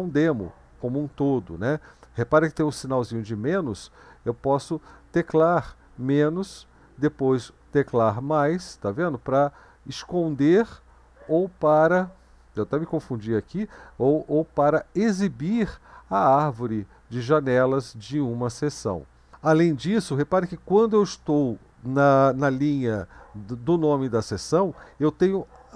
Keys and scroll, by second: 8.0 typing, 9.0-10.9 typing, 14.1 typing, 18.2 +, 20.5 Down, 20.8 Up.